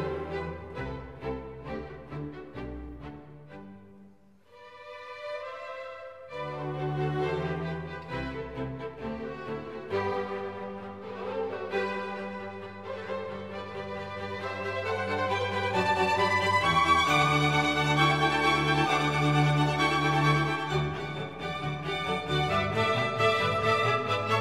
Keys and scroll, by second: 3.7-4.6 typing, 8.2 super+d, 11.2 Home.